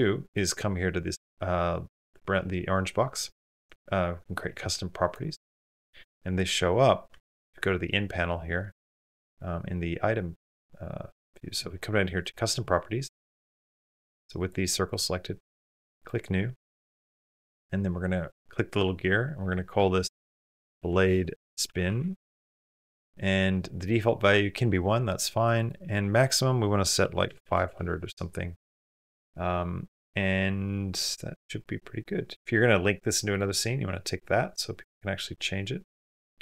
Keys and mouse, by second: 5.3 click, 6.9 n, 12.0 click, 13.5 click, 14.2 click, 14.6 click, 18.0-23.5 drag, 27.3 KP_0.